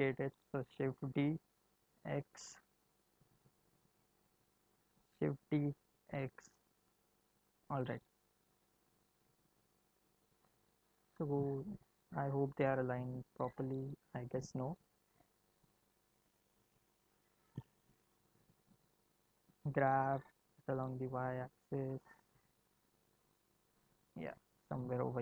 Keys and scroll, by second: 0.6 shift+d, 1.5 x, 5.1 shift+d, 5.5 x, 17.1 g, 20.3 y.